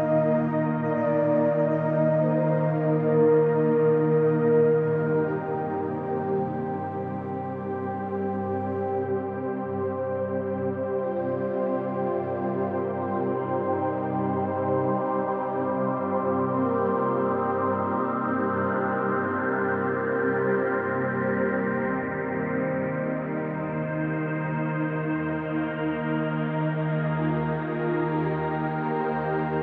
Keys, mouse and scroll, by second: 0.1-1.4 typing, 2.3-3.3 drag, 5.3-6.1 drag, 9.0 click, 11.9 click, 12.5 ctrl+s, 13.3-14.1 drag, 15.5-16.4 drag, 17.4 click, 19.7-20.7 drag, 22.5-24.8 alt+shift+drag, 25.4 click, 26.2 click, 27.5 click, 28.5-29.6 typing.